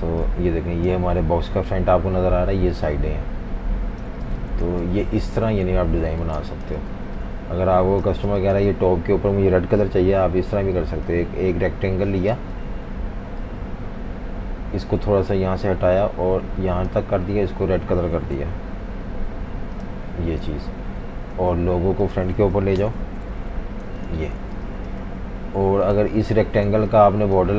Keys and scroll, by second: 4.1-4.7 typing, 5.4 super+-, 5.6 super+-, 6.3-8.3 typing, 9.8 m, 12.6 v, 18.4 i, 20.5 typing, 21.3 super+3, 22.8 shift+super+], 23.3 alt+super+3, 23.9-24.5 typing, 26.7-27.5 typing.